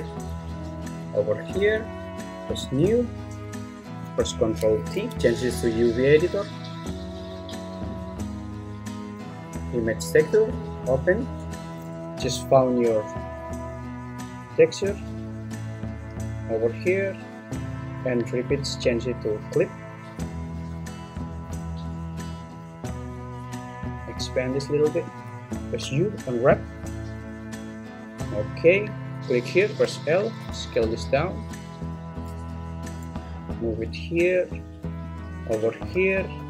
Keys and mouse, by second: 2.7-4.1 drag, 5.0 ctrl+t, 5.9-7.1 drag, 11.0 click, 18.4-19.9 drag, 24.1 click, 25.8 u, 29.8 l, 30.5 s, 32.2 click, 32.5 g, 36.4 l.